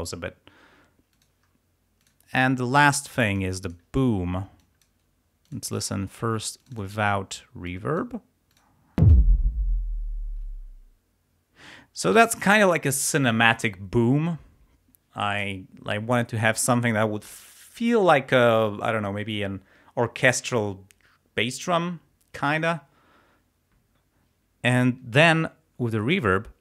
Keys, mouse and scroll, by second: 1.2 click, 2.0 click, 2.9 click, 3.7 click, 4.1 scroll down 2, 4.6 click, 5.5 click, 12.0 space, 26.0-26.4 scroll up 1.